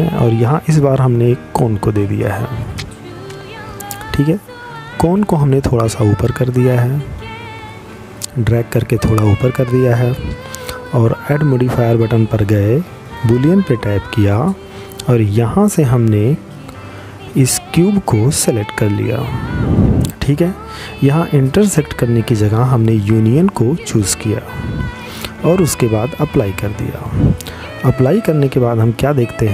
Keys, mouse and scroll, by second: 2.4 click, 8.9 click, 12.6 click, 18.9 click, 23.9 click, 26.3 middle click.